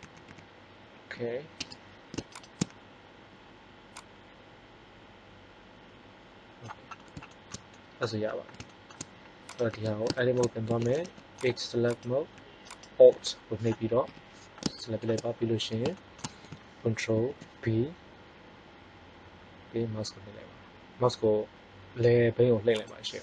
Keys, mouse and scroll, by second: 0.0 a, 0.2 a, 1.6 Tab, 9.6 Tab, 10.8 ctrl+Tab, 14.0 KP_3, 17.0 ctrl+b, 22.8-23.2 middle drag.